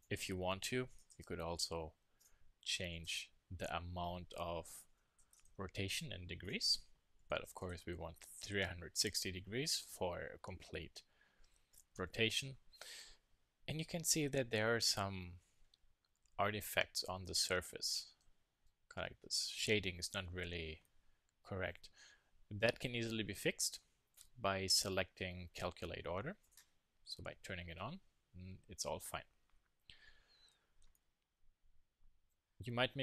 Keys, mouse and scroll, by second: 2.2-3.9 drag, 6.4-8.2 drag, 13.0-16.0 middle drag, 20.9 middle click, 26.4-28.2 drag, 28.2 middle click, 28.6 KP_1, 29.0 KP_3, 30.9-32.2 middle drag.